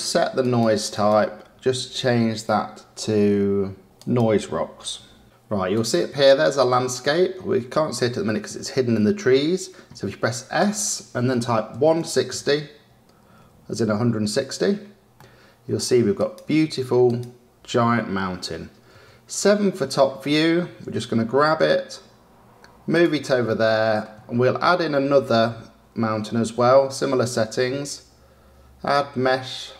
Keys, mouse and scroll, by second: 0.9 click, 5.7 click, 7.8 scroll up 2, 8.5 scroll up 1, 8.9-10.5 scroll down 2, 10.5 s, 15.1-16.1 middle drag, 16.1 click, 17.0 click, 18.9 KP_7, 19.7-20.8 scroll down 3, 20.8 g, 23.4-26.3 shift+middle drag, 26.3 shift+a.